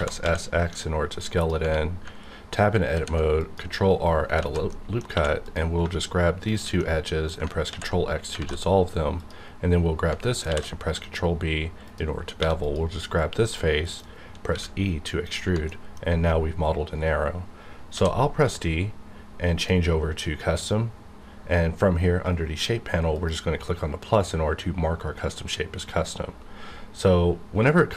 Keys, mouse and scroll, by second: 0.2 x, 1.4 click, 1.6 Tab, 2.9 ctrl+r, 3.3 click, 3.7 right click, 4.4 alt+z, 4.7 middle click, 5.1 2, 5.4 click, 6.5 shift+click, 6.8 middle click, 7.6 ctrl+x, 9.1 click, 10.5 ctrl+b, 11.8 click, 12.4 3, 12.6 click, 13.1 scroll down 1, 13.4 middle click, 14.5 e, 15.2 click, 15.7 middle click, 17.9 d, 19.5 click, 23.1 click.